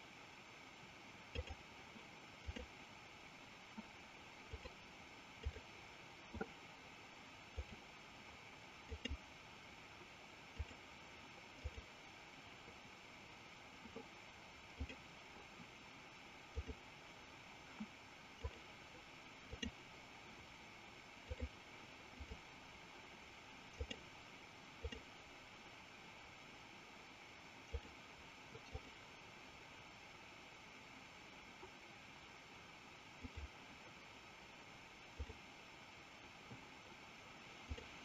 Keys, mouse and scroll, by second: 1.1-3.3 drag, 4.4-5.8 drag, 7.7-9.3 drag, 10.4-12.0 drag, 14.7-17.0 drag, 18.4-20.0 drag, 21.4-22.5 drag, 23.8-25.4 drag, 27.5-29.0 drag, 33.2-35.5 drag, 37.5-38.0 drag.